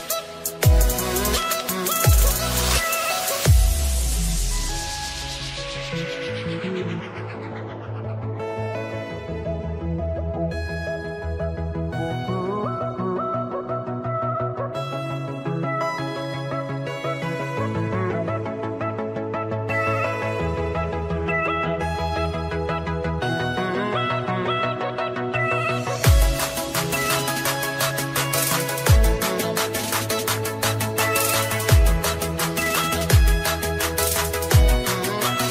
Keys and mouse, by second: 2.9 click, 4.1 click, 6.6 click, 9.9 click, 12.1 click, 12.7 click, 13.3 click, 15.5 click, 18.6 click, 19.6-26.4 typing, 26.6 click, 29.0 click, 32.0 click.